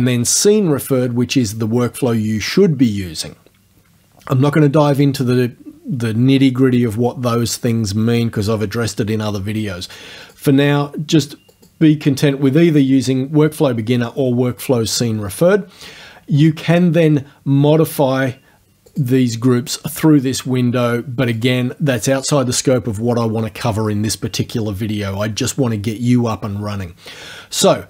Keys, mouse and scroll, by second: 10.3 click, 11.5 click, 19.0 click, 21.4 click.